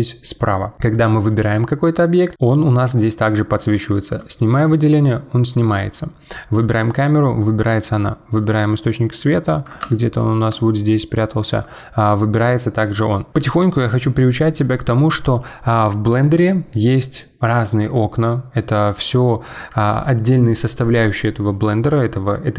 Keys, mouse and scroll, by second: 0.9 click, 4.1 click, 6.6 click, 8.6 click, 9.2-10.5 middle drag, 10.5-11.5 shift+scroll down 5, 11.5 click, 12.0 click.